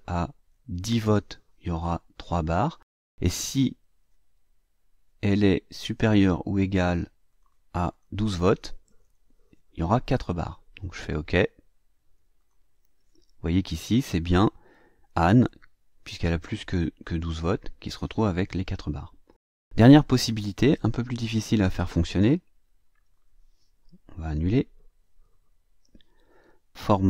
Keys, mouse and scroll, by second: 0.8 KP_1, 1.0 KP_0, 6.7 click, 7.2 click, 7.8 click, 8.8 KP_1, 8.9 KP_2, 12.3 click, 25.4 ctrl+z.